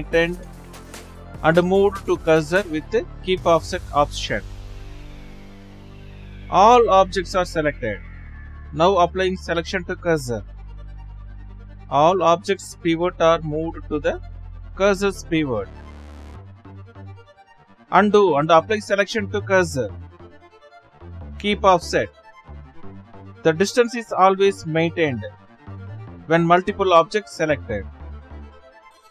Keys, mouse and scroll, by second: 0.0 shift+s, 1.8 ctrl+z, 2.5 Left, 5.1 ctrl+z, 6.3 Left, 12.5 shift+s, 17.1 ctrl+z, 20.5-24.4 right drag, 27.8-29.1 right drag.